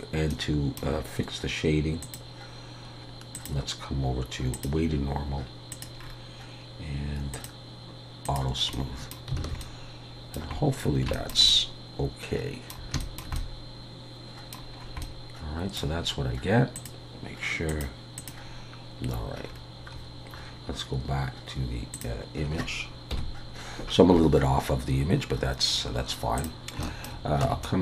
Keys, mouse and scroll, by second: 0.4 middle click, 2.0 click, 3.3 click, 6.0-7.3 scroll down 4, 7.3 click, 8.2 click, 8.7 middle click, 9.4 alt+a, 9.6 middle click, 10.7-11.1 scroll down 4, 11.1 shift+middle click, 11.5 middle click, 13.0 shift+middle click, 13.3 middle click, 14.7 scroll up 4, 15.0 middle click, 16.7 click, 19.4-22.0 scroll down 4, 22.0 click, 23.1 KP_1, 25.0 scroll up 3, 26.4 click, 26.8 shift+middle click, 27.4 Tab, 27.6 middle click.